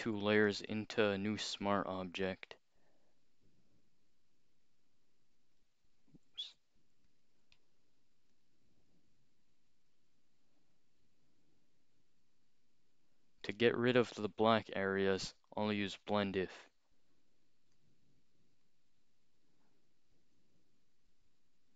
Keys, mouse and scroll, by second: 0.4 right click, 0.5 click, 1.4 click, 6.3 ctrl+z, 7.1 shift+click, 7.6 right click, 8.3 click, 15.2 click, 15.9 click, 17.7 click, 18.6-21.7 drag.